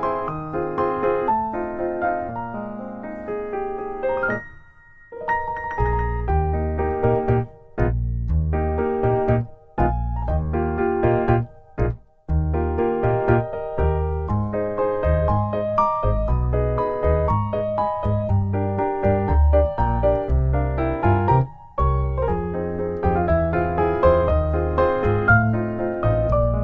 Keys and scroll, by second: 0.2 Caps_Lock, 0.5 Tab, 1.0 Tab, 1.2 Delete, 1.8 Delete, 3.2 Tab, 4.3 Delete, 15.7 typing, 16.0 ctrl+s, 16.1 F2, 18.5 Delete, 18.6 Delete, 18.8 Delete, 19.3 Tab, 20.5 typing, 20.8 Return, 20.9 Return, 21.0 Return.